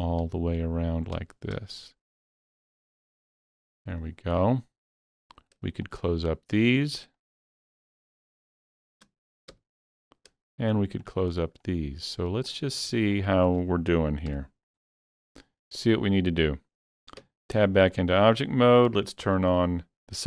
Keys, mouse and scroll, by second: 0.0-1.6 typing, 2.6-3.8 middle drag, 4.3 middle click, 4.5 f, 5.3 click, 5.9 shift+click, 7.2 shift+click, 8.0 shift+click, 8.5 shift+click, 9.5 f, 11.1 shift+click, 12.5 shift+click, 13.2 shift+click, 14.3 f, 15.2 alt+a, 15.3-15.7 scroll down 3, 15.7-17.7 middle drag, 17.2 Tab, 17.7 shift+middle click, 18.0-19.6 shift+middle drag, 19.6 click.